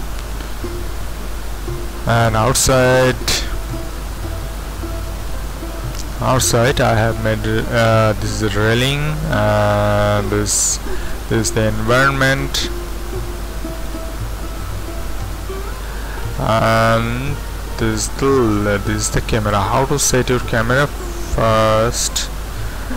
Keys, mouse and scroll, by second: 3.2-4.6 scroll up 1, 3.8 middle click, 4.8-6.8 scroll up 1, 5.4-6.8 middle drag, 10.1-11.1 scroll down 1, 15.4-16.3 scroll up 2, 18.7 z, 19.3-20.4 drag.